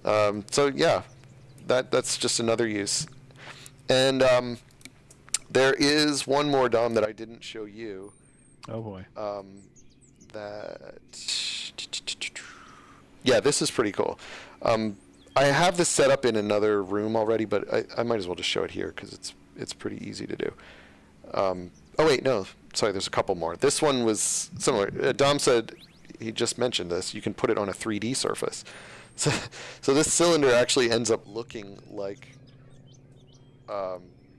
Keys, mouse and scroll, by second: 2.7 space, 4.7 click, 6.8 click, 22.7 click, 29.1-29.8 shift+scroll down 2, 30.3 shift+scroll down 1, 30.9 shift+scroll down 1, 31.8 click, 32.1-34.3 typing.